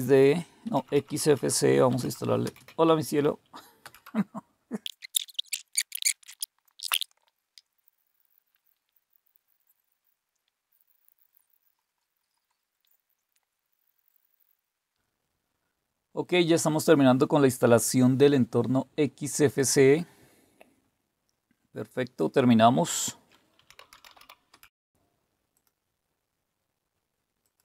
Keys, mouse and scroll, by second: 0.6 Up, 0.8 Up, 1.1 Up, 1.3 Up, 1.5-2.8 typing, 3.8 typing, 22.2 click, 23.3-24.6 typing, 24.8 click, 25.5 click, 27.4 click.